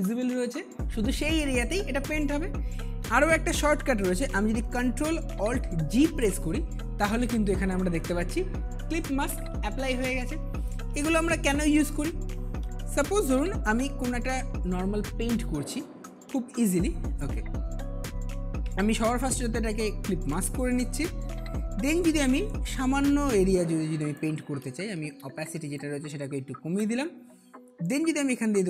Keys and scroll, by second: 5.9 ctrl+alt+g, 8.1 ctrl+alt+g, 11.3 ctrl+alt+z, 12.8 ctrl+alt+z, 24.8 ctrl+alt+z.